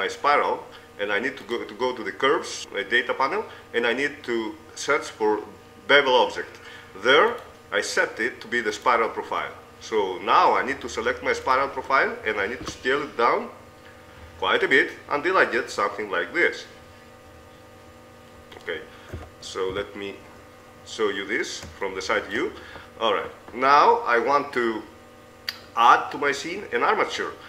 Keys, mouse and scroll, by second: 1.0 middle click, 1.8-2.9 right drag, 7.5 right click, 9.2-11.8 middle drag, 11.8-13.6 right drag, 13.2 s, 18.9 middle click, 19.7 KP_3, 20.1 KP_5.